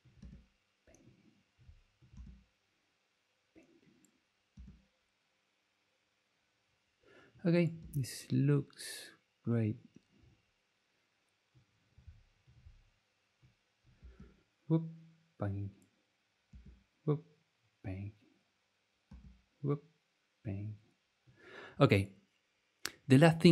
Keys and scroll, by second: 0.2 space, 2.1 space, 4.5 space, 7.8 space, 14.0 space, 16.5 space, 19.0 space.